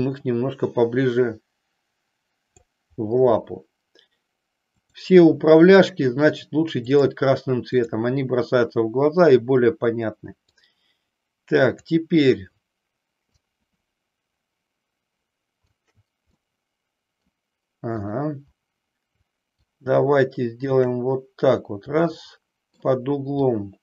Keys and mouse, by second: 0.0-2.6 drag, 4.7 click, 5.7-7.0 drag, 7.9 click, 10.6-11.8 drag, 13.3-15.8 shift+drag, 16.3 middle click, 18.1 click, 19.6-20.7 shift+drag, 22.1 shift+middle click, 23.6-23.8 shift+drag.